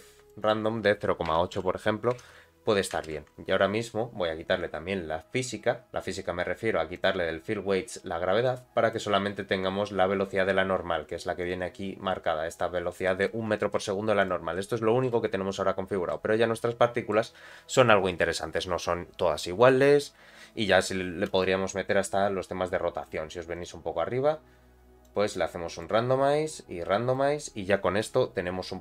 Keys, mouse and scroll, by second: 0.4-3.8 drag, 3.1 shift+Left, 4.0 scroll down 2, 5.8-6.9 scroll down 4, 6.9 click, 7.5-8.4 scroll down 2, 8.4 click, 9.8-10.1 scroll up 2, 10.6-11.4 scroll up 4, 11.4 click, 11.7-12.1 scroll down 2, 12.6-13.2 scroll down 3, 13.0 middle click, 13.3 space, 13.7 middle click, 14.2 click, 14.5 middle click, 15.1 space, 15.4-15.9 scroll up 2, 15.9 space, 16.1-17.1 middle drag, 23.0 click, 23.5 click, 23.9 scroll down 2, 25.0 click, 26.5 click.